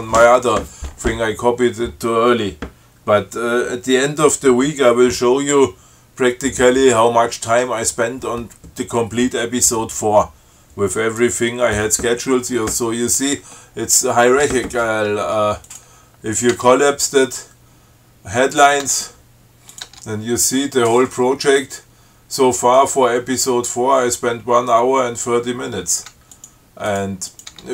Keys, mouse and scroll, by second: 13.8 scroll up 2, 15.9 click, 16.8 Tab, 18.9 click, 19.1 Tab, 20.0 click, 20.2 Tab, 26.6 click, 27.2 click.